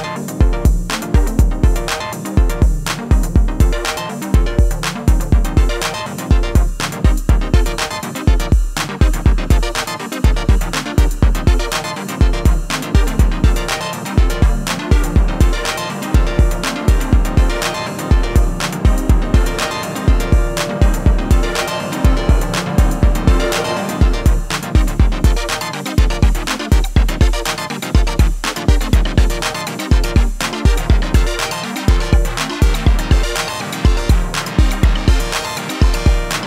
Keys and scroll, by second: 23.6 ctrl+c, 27.7 ctrl+v, 31.0 p.